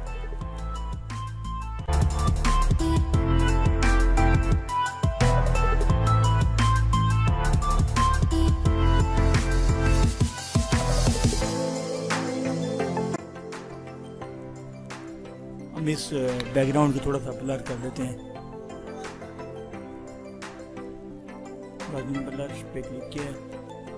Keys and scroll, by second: 10.0 ctrl+-, 10.8 ctrl++.